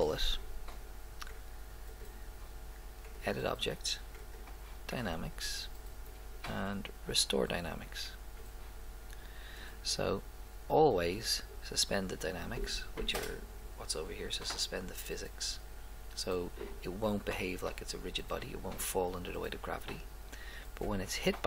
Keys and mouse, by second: 1.9-3.7 drag, 4.3 click, 8.4-9.7 drag.